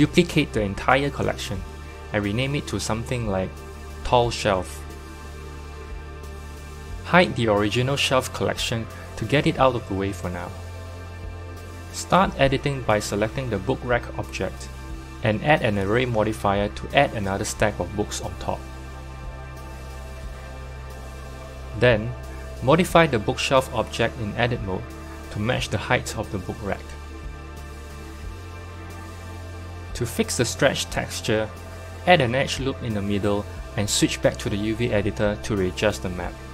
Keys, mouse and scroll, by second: 0.6 right click, 1.6-6.4 drag, 6.4 shift+l, 8.0-10.2 drag, 13.6-18.0 drag, 18.0 BackSpace, 20.7 click, 22.2 KP_1, 23.3 Tab, 24.4 1, 24.6 click, 25.2 scroll up 1, 26.2 g, 30.3 Tab, 30.9 Tab, 31.9 ctrl+r, 35.1-36.5 drag.